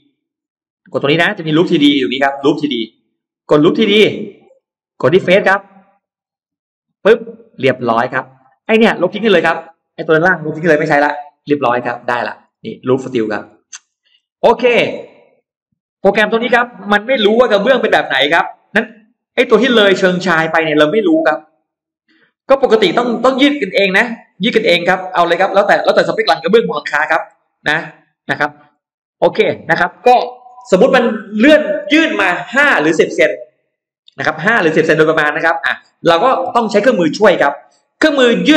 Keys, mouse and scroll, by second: 3.7 click, 4.9 click, 5.7 middle click, 6.1 scroll up 1, 6.9 click, 7.9 middle click, 8.1-8.5 scroll down 1, 8.6 space, 8.9 click, 10.7 Delete, 11.1 Delete, 11.7 middle click, 12.3-13.1 scroll down 4, 13.3 middle click, 13.9-14.3 scroll down 2, 14.3-14.7 scroll up 1, 14.9 middle click, 15.9-16.6 scroll down 4, 16.3 middle click, 17.7 shift+x, 18.1-19.1 shift+drag, 20.3 shift+click, 21.5 shift+click, 22.3 shift+click, 22.9 shift+click, 23.5 shift+click, 24.3 shift+right click, 24.5 shift+right click, 25.0 scroll down 2, 25.3-26.6 middle drag, 26.8-27.6 scroll up 4, 27.6 middle click.